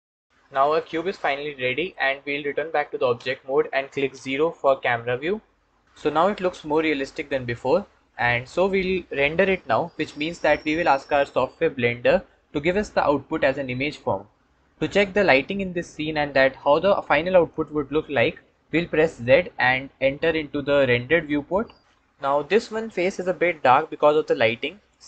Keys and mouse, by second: 0.8-1.8 middle drag, 3.0 Tab, 4.5 KP_0, 19.2 z, 24.7-25.0 ctrl+drag.